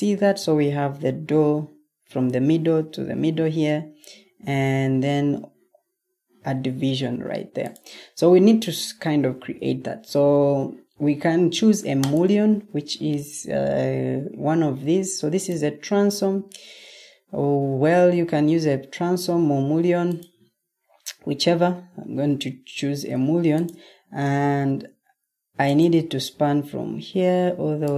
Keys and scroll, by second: 9.2 Escape, 24.5 Escape.